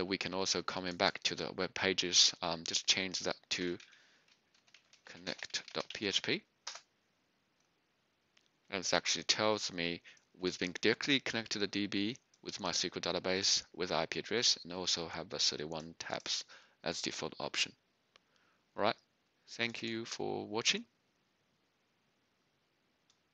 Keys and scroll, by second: 3.7-6.6 typing, 6.6 Return.